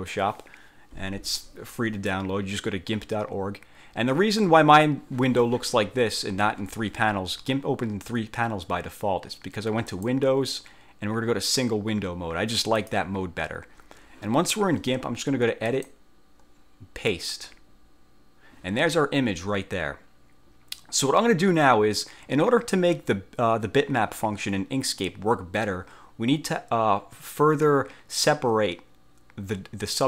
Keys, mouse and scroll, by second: 10.0 click, 12.9 click, 15.8 click, 17.2 click.